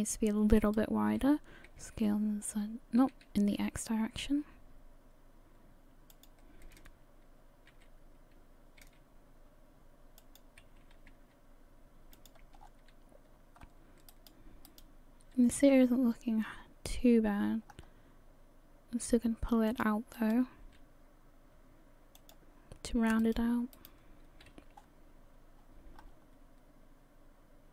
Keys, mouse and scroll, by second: 0.6 alt+right click, 1.7 s, 7.7 s, 10.6 g, 12.6-13.6 scroll down 5, 13.6-14.1 scroll up 1, 14.1 right click, 15.2 right click, 15.5 g, 20.2 right click, 20.6 g, 23.2 right click, 24.5 right click, 24.5 g.